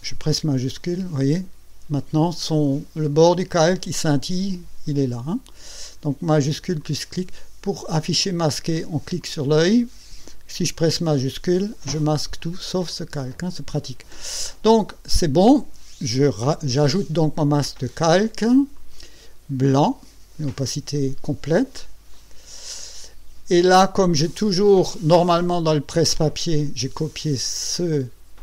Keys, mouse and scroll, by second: 0.8 shift+click, 6.8 shift+click, 7.6 shift+click, 8.2 click, 8.7 click, 9.2 click, 12.0 shift+click, 12.9 shift+click, 18.7 click, 22.1 click.